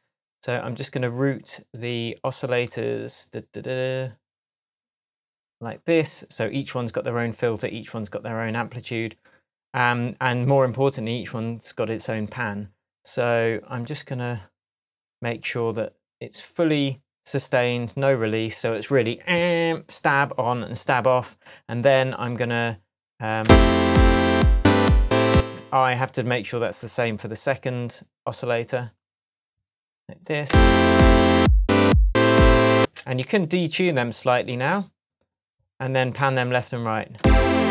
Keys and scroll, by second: 23.4 space, 25.3 space, 30.4 space, 32.7 space, 37.1 space.